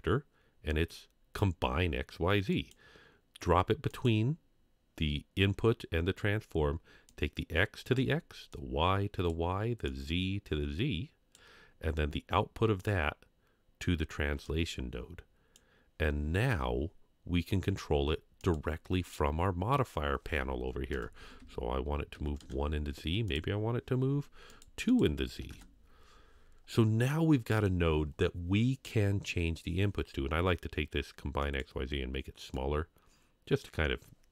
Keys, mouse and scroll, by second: 7.1-8.0 drag, 8.5-9.4 drag, 9.9-11.3 drag, 12.8 click, 14.4-15.6 drag, 18.4-22.4 drag, 21.4 Tab, 23.3-24.5 drag, 24.9 click, 26.6 scroll down 2, 27.1-27.6 middle drag, 31.4 click, 32.5 click.